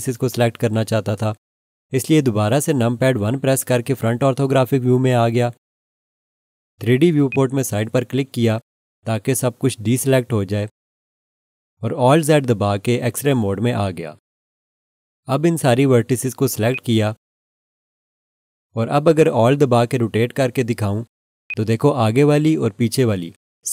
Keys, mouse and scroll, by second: 3.7 1, 7.3 click, 12.9 alt+z, 16.7 click, 21.5 alt+click.